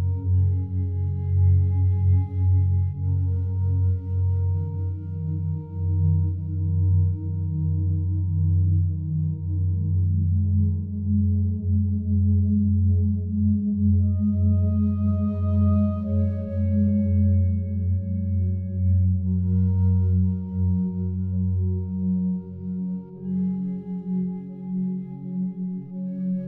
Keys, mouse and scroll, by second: 0.5 click, 1.1 click, 6.2 click, 11.4-13.5 alt+shift+drag, 14.6 click, 17.3 alt+shift+click, 23.3 click, 24.0 click.